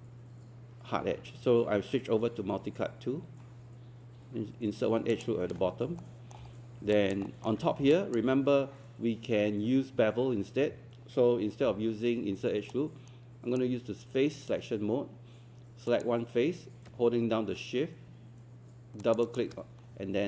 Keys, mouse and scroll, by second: 5.1 ctrl+click, 6.0 alt+middle click, 6.5-6.8 scroll up 1, 7.0 alt+click, 7.3 alt+middle click, 7.9 alt+click, 11.6 q, 12.7-14.2 right drag, 15.9 click, 19.0 shift+click, 19.2 shift+click.